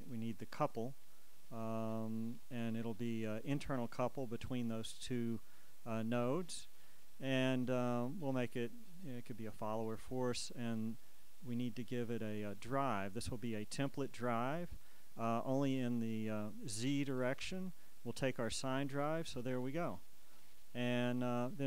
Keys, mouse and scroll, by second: 6.4 click, 11.2 click, 12.4 click, 14.0 click, 16.9 click, 18.9 click, 20.5 click.